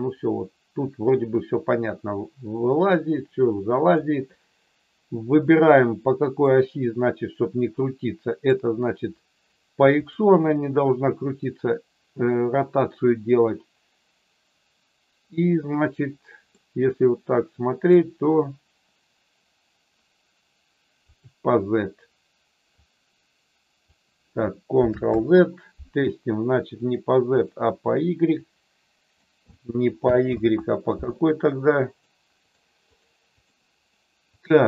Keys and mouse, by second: 6.5-8.5 middle drag, 16.6-18.0 middle drag, 21.1 click, 22.9 click, 25.1 ctrl+z, 26.9 click, 27.3 click, 28.3 click, 30.2 ctrl+z, 32.0 click, 32.3 click, 32.9 click, 33.3 click, 34.3 click.